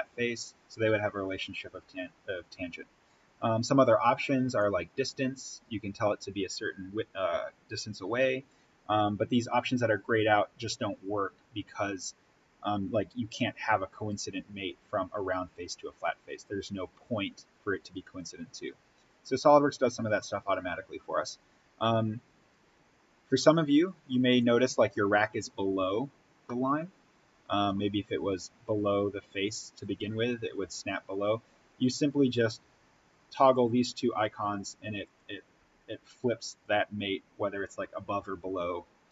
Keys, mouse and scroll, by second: 4.4 click, 8.4 click, 19.9-20.7 scroll up 1, 24.3 click, 25.2-25.8 scroll down 1, 26.3-30.2 middle drag, 33.4 click.